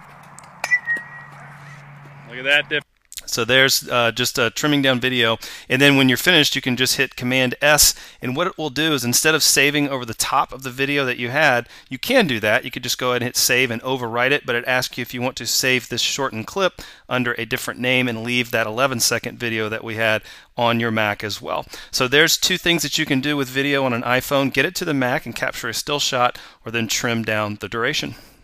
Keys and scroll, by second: 7.3 super+s.